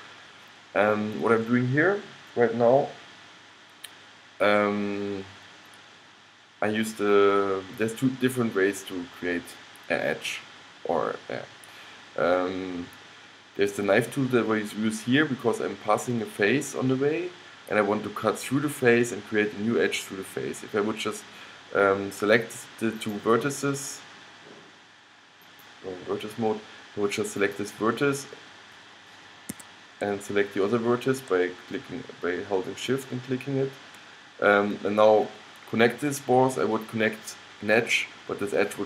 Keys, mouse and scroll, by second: 23.1-25.1 drag, 25.5-29.2 drag, 33.0-38.8 drag.